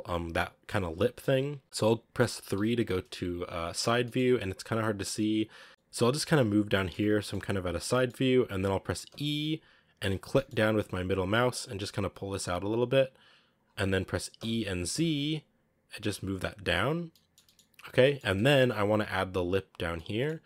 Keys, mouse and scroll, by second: 1.1 KP_1, 2.5 KP_3, 2.9-3.6 scroll up 3, 3.6-3.9 scroll down 1, 3.9 shift+middle click, 4.1-5.6 scroll up 4, 5.6 middle click, 5.9-6.6 scroll down 1, 6.6 middle click, 7.0 scroll down 1, 7.1 shift+middle click, 7.7 scroll up 1, 7.8-9.0 middle drag, 9.0 e, 14.3 e, 17.0-20.4 middle drag.